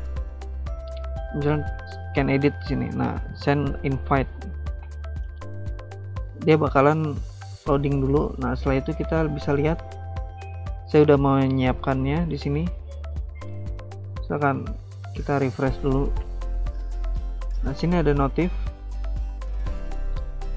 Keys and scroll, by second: 9.9 alt+Tab, 10.8 alt+Tab, 13.2 ctrl+r.